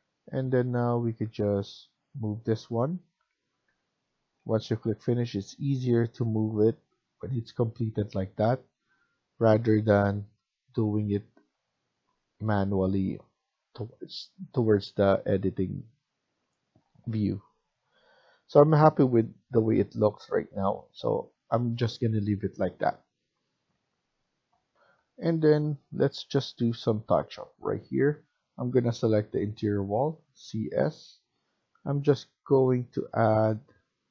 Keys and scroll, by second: 3.1 Right, 3.7 Right, 4.3 Left, 4.7 Left, 7.0 Down, 9.3 Escape, 9.5 Escape, 9.8 Escape, 12.3 Escape, 18.2 Escape, 24.7 F1, 30.1-30.9 typing.